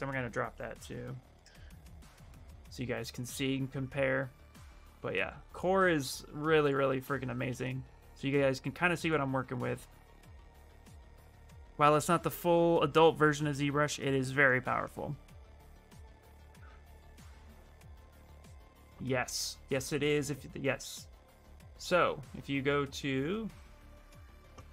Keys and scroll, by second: 0.0-0.7 typing, 1.1 Return, 7.2 ctrl+c, 10.5 ctrl+v, 10.9 Return.